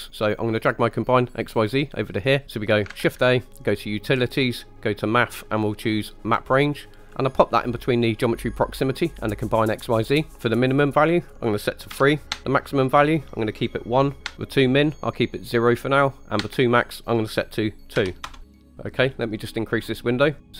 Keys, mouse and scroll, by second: 0.2-2.4 drag, 2.4 right click, 2.9 shift+a, 10.1 click, 10.8-18.4 drag, 18.4 shift+middle click, 18.6-19.3 scroll up 3, 19.3 click, 20.1-20.5 middle drag.